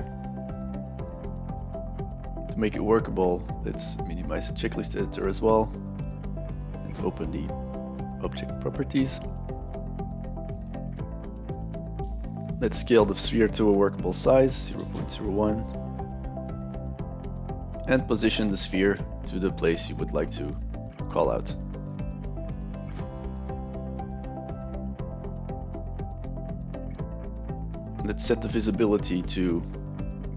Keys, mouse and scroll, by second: 1.5 click, 4.2 click, 5.7 click, 7.1-8.3 drag, 9.5-10.6 drag, 11.5 click, 16.0 click, 16.5 click, 17.1-17.6 drag, 22.6 click, 22.9 click, 23.0 alt+click, 23.3 click, 23.7 f, 23.9 alt+click, 24.1 alt+click, 24.4 click, 24.9 alt+middle click, 25.2 click, 25.7 alt+click, 26.3 click, 26.7 alt+click, 29.2 click.